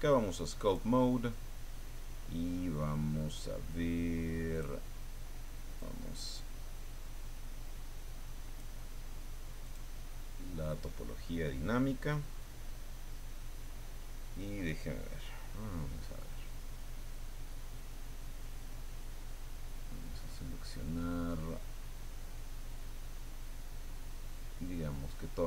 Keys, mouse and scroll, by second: 0.6 click, 2.6-3.1 scroll down 1, 4.5 click, 5.7-8.7 drag, 9.6 click, 19.1-20.4 drag, 22.4 click, 23.4-24.6 drag, 25.0 click.